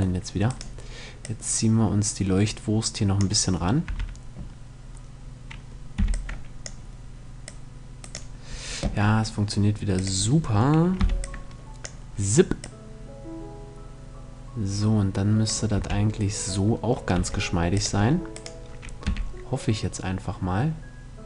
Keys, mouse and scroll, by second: 0.7-2.6 drag, 3.4 a, 5.5 b, 7.0-8.7 drag, 9.5-11.4 drag, 10.5 b, 12.1-13.8 drag, 15.3 a, 16.7 c, 18.6 g.